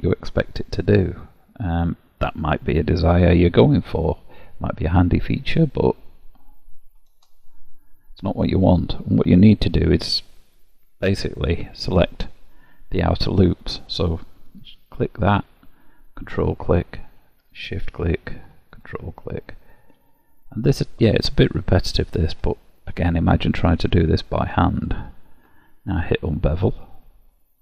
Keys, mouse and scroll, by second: 6.1 click, 9.0 middle click, 13.5 click, 16.2 ctrl+click, 17.6 shift+click, 18.8 ctrl+click, 19.3 middle click, 20.7 ctrl+click, 21.9 ctrl+click, 22.5 shift+middle click, 23.7 shift+click, 24.9 ctrl+click, 26.3 click, 27.4 middle click.